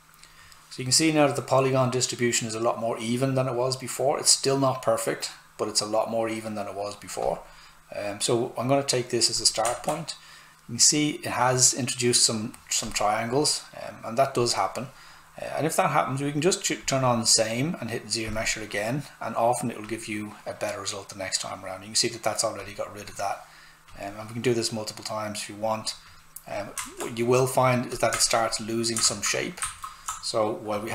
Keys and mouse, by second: 7.2 click, 9.7 alt+right click, 12.8 click, 16.8 click, 22.6 click, 26.8 alt+right click, 27.9 click, 29.0 ctrl+z.